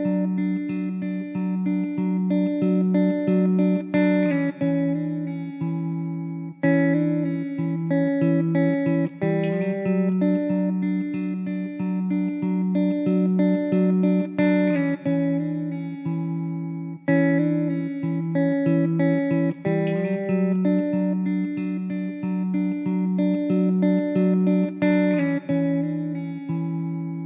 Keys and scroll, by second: 1.1 ctrl+j, 5.2 alt+z, 6.1 alt+z, 9.4 shift+d, 13.6 alt+z, 15.4 ctrl+z, 18.1 Tab, 18.5 1, 23.4 Tab.